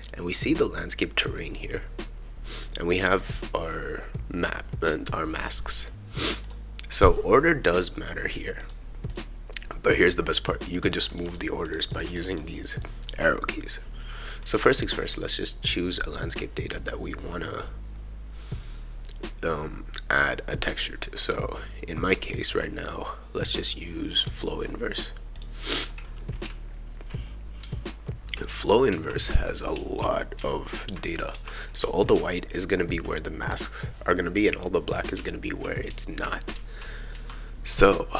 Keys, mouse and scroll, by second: 3.0 scroll up 2, 4.6-5.2 scroll up 2, 6.4 click, 7.1-7.9 scroll down 2, 8.6 click, 9.1 click, 10.7 click, 11.1 click, 11.6 click, 11.8 click, 12.0 click, 12.1 click, 12.3 click, 14.4 click, 24.0 scroll up 2, 24.2 click, 25.7 scroll up 2, 26.0-33.5 right drag, 26.4 d, 27.6-31.8 typing, 28.7 scroll up 2, 33.0 w, 35.1-38.1 right drag, 35.1 s, 35.8 q, 36.5 a, 37.7 w.